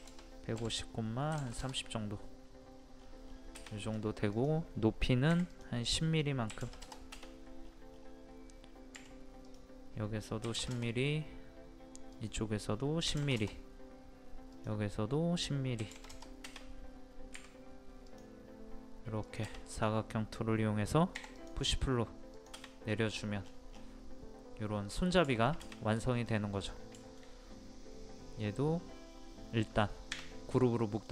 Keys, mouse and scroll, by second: 2.6 scroll up 1, 3.8 click, 6.5 KP_1, 7.6 scroll up 1, 9.0 typing, 9.5 click, 10.4 KP_1, 12.1 click, 13.1 KP_1, 14.5 click, 15.8 KP_1, 18.1-20.8 drag, 21.2 p, 21.4 click, 22.8 scroll down 1, 25.3 shift+middle click, 26.0 click, 27.0 shift+middle click.